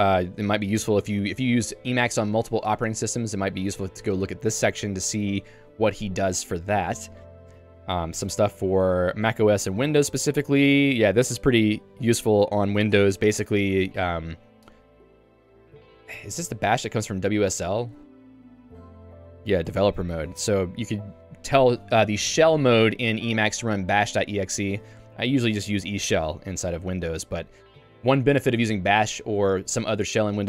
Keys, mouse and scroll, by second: 0.1 j, 7.9 ctrl+d, 8.8 j, 18.0 Escape, 19.4-20.2 typing, 21.6 Escape, 25.4 Escape, 25.8 Escape, 26.1 j.